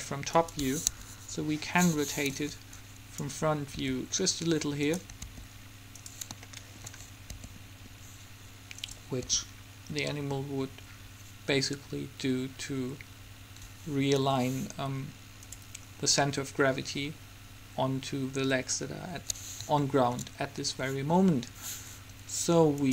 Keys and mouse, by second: 0.6 middle click, 1.0 KP_1, 2.5 click, 3.9 r, 5.4 r, 6.5-8.4 middle drag, 7.5 r, 9.4 r, 16.1-18.6 middle drag, 20.0 middle click.